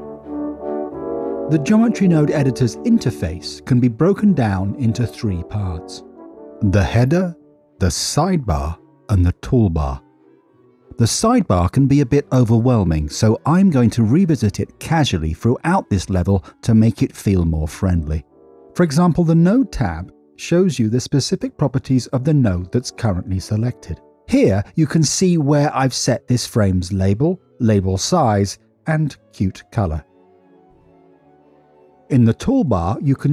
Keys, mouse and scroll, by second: 3.4 middle click, 4.2 middle click, 7.7 n, 9.6 t, 11.1 click, 12.4 click, 19.9 click, 32.8 click.